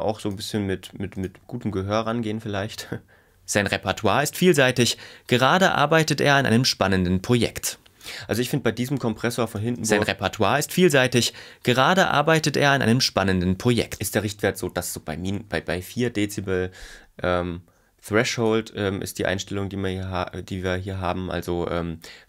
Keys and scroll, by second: 2.6 space, 9.0 space, 14.0 space.